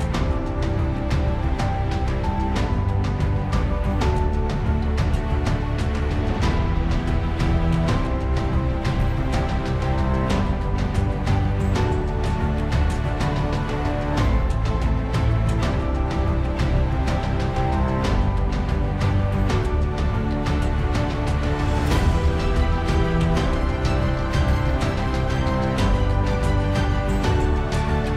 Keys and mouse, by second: 0.3 ctrl+z, 3.4 ctrl+z, 7.2 middle click, 7.8 alt+middle click, 9.6 middle click.